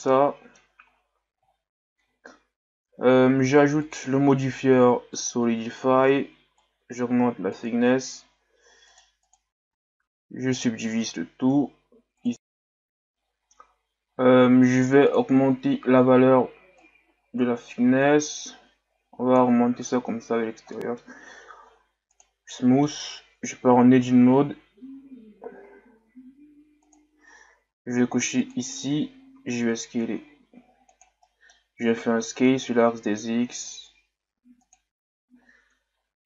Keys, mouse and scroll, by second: 0.1 middle click, 1.0-1.5 scroll up 1, 1.5-2.2 scroll up 1, 2.2-3.0 scroll up 1, 3.0 Tab, 5.3-9.2 drag, 10.6-12.3 drag, 14.6-19.8 drag, 20.1-20.7 scroll down 1, 20.7-21.7 middle drag, 21.7 w, 22.5 middle click, 23.0 Tab, 26.8-28.5 drag, 29.3 s, 31.2 middle click, 32.2 s, 35.4 scroll up 1, 35.9-36.2 scroll up 1.